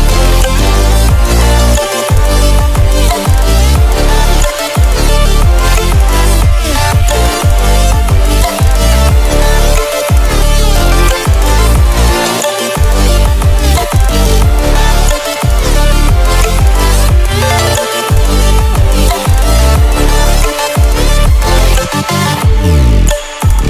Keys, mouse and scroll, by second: 12.9 click, 13.0 click, 17.4 click, 17.7-18.3 ctrl+alt+scroll down 2, 18.3-19.4 ctrl+alt+scroll up 2, 19.4-19.8 ctrl+alt+scroll down 2, 19.8-20.7 ctrl+alt+scroll up 2, 20.7 ctrl+scroll up 1, 21.5 scroll down 1, 22.2-22.6 scroll down 1, 22.6 click, 23.1 scroll down 1.